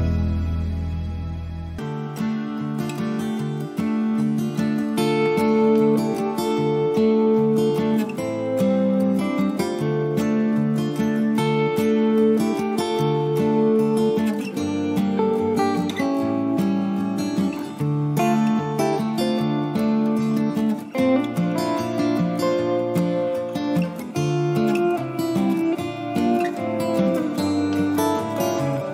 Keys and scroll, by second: 2.5 Up, 3.2 ctrl+a, 17.6 ctrl+d, 26.0 ctrl+0.